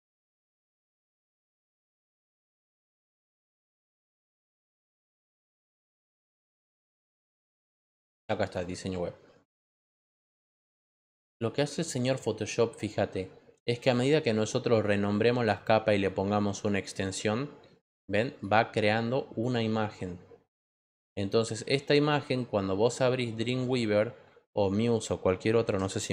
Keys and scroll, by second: 25.9-26.1 typing.